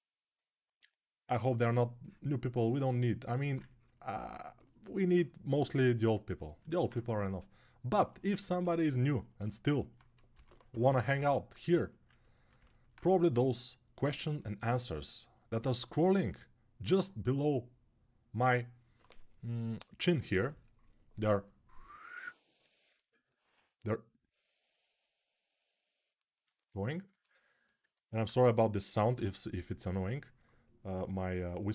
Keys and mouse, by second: 5.3 g, 7.8-13.0 alt+middle drag, 10.1-10.9 typing, 28.9 g.